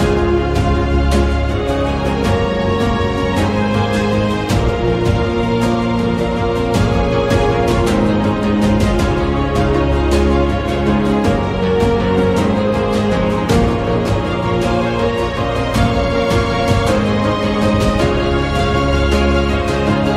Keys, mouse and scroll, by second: 0.8 Tab, 1.1 middle click, 1.9 shift+middle click, 2.1 shift+Tab, 2.6 shift+middle click, 4.2 g, 5.4 click, 6.6 g, 9.0 a, 9.3 middle click, 10.6 click, 10.9 ctrl+a, 11.3 shift+middle click, 13.4-14.8 drag, 15.9 click, 17.1-20.1 middle drag.